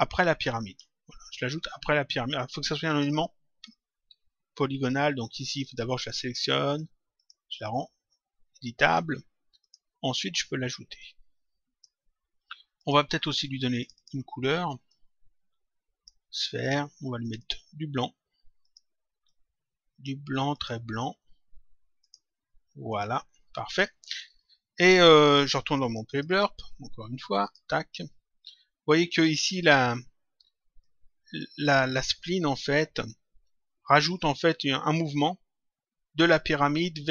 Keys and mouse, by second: 2.8 click, 4.0 Delete, 5.5 click, 7.1 click, 9.5 click, 10.9 click, 12.7 click, 17.1 click, 18.6 click, 20.5 click, 21.9 click, 26.1 click, 27.3 click, 28.8 click, 30.7 click.